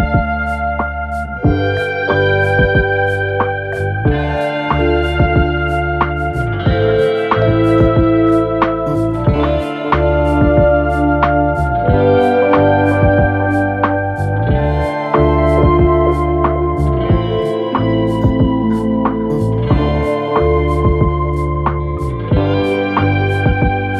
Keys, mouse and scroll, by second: 10.6 ctrl+click, 11.1 ctrl+click, 11.8 ctrl+click, 13.0 ctrl+click, 13.5 ctrl+click, 14.4 click, 15.6 ctrl+click, 16.4 ctrl+click, 17.5 ctrl+click, 18.1 ctrl+click, 18.8 click, 21.4 ctrl+click, 22.6 ctrl+click.